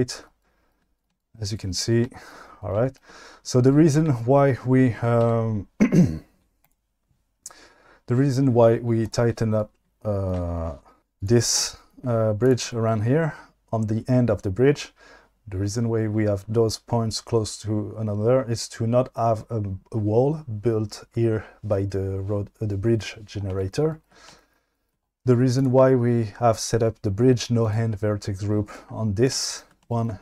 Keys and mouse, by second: 5.2 q, 6.3 q, 9.0 click, 11.0 Tab, 11.2 click, 25.6-26.2 drag, 27.6 click.